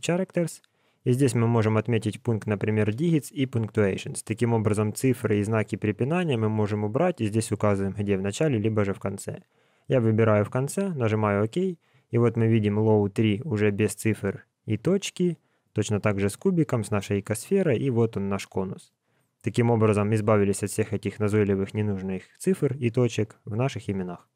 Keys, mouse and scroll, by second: 14.3 scroll up 1, 16.0 scroll up 10, 16.6 scroll up 1, 16.7 scroll down 1, 16.8 scroll down 1, 17.0-17.4 scroll up 8, 17.4 scroll down 1, 19.0-19.5 scroll down 10, 20.4 scroll down 1, 21.4 scroll down 1, 21.5 scroll down 1.